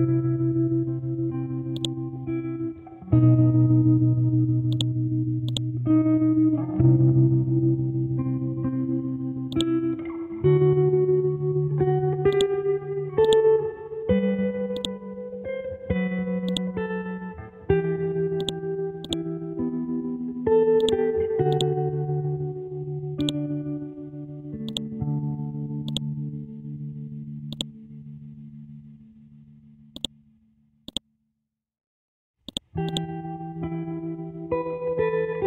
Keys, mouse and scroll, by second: 1.8 click, 4.7 click, 6.6 Home, 7.4 space, 9.0 ctrl+a, 9.5 click, 12.3-17.4 drag, 17.4-18.4 scroll up 1, 18.4 click, 19.3 space, 20.8-23.2 drag, 24.7 right click, 25.9-28.9 drag, 28.9-29.5 scroll up 1, 29.5-30.0 shift+scroll up 1, 30.0-31.7 shift+drag, 31.7 scroll down 1, 32.5 click, 33.5 e, 34.1 scroll up 1, 34.4 Down.